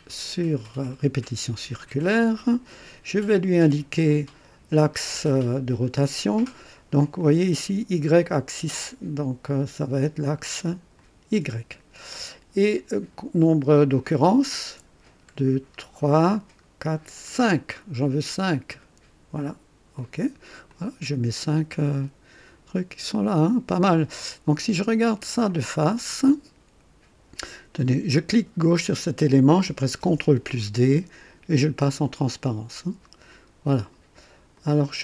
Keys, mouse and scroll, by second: 0.8 click, 3.2 right click, 4.1-4.8 drag, 7.2-7.8 drag, 9.4 click, 10.9 click, 14.9 scroll up 1, 15.7 scroll up 1, 16.7 scroll up 1, 19.9 click, 20.7-23.9 drag, 25.0 click, 26.0-26.8 right drag, 28.5 click, 30.0 ctrl+d, 31.8-34.0 drag, 34.5 click.